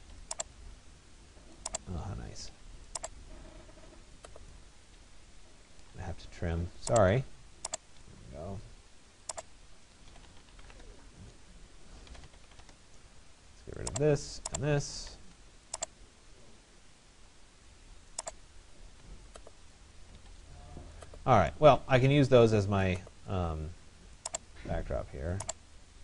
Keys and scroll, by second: 10.3 Return, 15.9 Escape, 19.7 Escape, 20.7 Escape, 25.9 Escape.